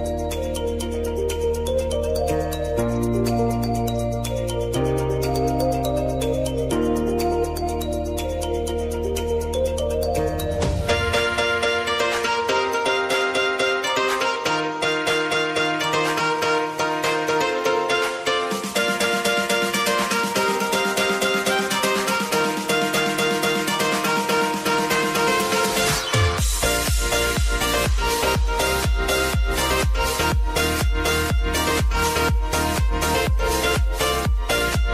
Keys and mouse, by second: 0.0 shift+r, 2.7 click, 4.5 space, 6.8-7.4 typing, 8.4 space, 9.5-10.8 drag, 10.8 F9, 15.4-20.8 drag, 21.1 space, 23.5-27.3 drag, 27.3 ctrl+z, 29.1-32.4 drag, 32.4 ctrl+z, 33.2-34.6 drag, 34.6 =.